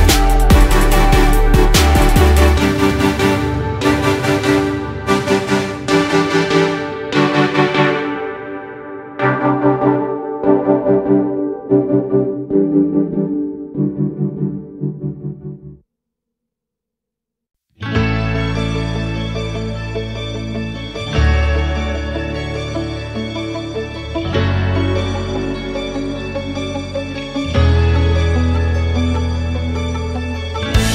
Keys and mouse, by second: 10.1 click, 12.3-16.0 drag, 18.1 click, 22.2 click, 23.0 click, 26.6 click.